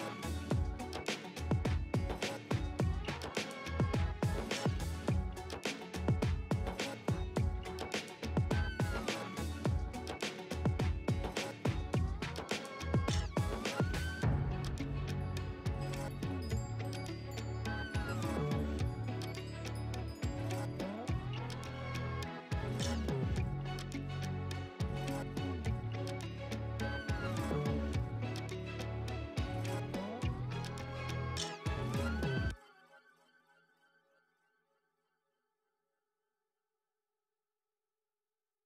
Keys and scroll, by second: 0.1 ctrl+space, 0.5 ctrl+space, 2.9-4.3 typing, 5.6 space, 6.5 space, 7.5 [, 9.2 3, 13.2 space, 14.7-18.3 typing, 26.5-27.5 typing, 33.3 3.